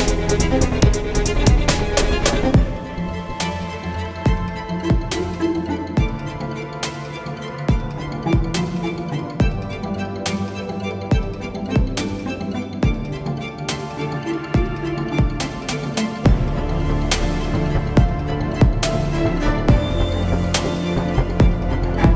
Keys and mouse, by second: 1.4 z, 5.3 middle drag, 5.8 z, 6.6 Tab, 7.9 a, 8.5 x, 9.6 Tab, 11.0 KP_7, 11.4 z, 12.6 shift+a, 13.6 s, 15.0 s, 18.0 Tab, 18.3 Tab, 18.9 r, 20.8 r.